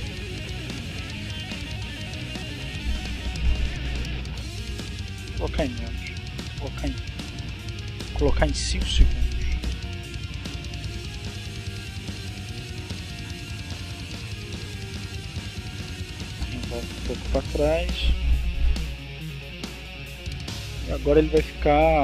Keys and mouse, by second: 0.8-1.9 drag, 5.0-6.6 drag, 7.7-10.3 drag, 10.5 click, 13.8 click, 15.5-16.5 drag, 18.2-20.3 drag, 20.8-22.0 drag.